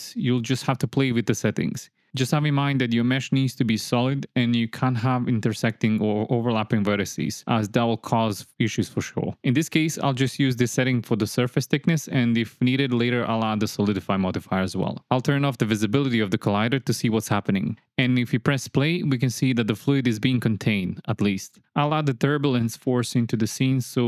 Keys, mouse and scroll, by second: 9.3-11.6 drag, 14.6 click, 15.7 space, 17.7 space, 22.1 shift+a.